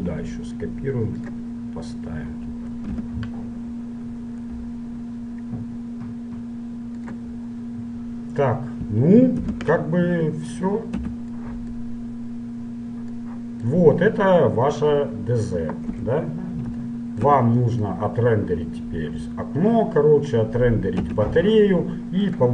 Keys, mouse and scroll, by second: 0.0 shift+d, 3.0 KP_Decimal, 4.8 g, 7.4-10.0 middle drag, 9.6 KP_Decimal, 10.3 middle click, 11.2 z, 13.4 middle click, 16.2 KP_Divide, 19.3-21.1 middle drag, 21.1 a.